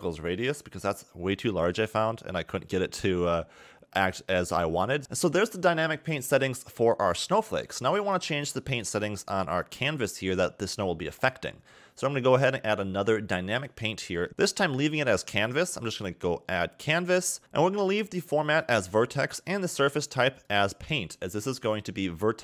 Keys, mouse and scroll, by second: 5.0 click, 7.9 click, 13.3 click, 15.7 click, 16.7 scroll down 3, 17.4 click, 19.9 click.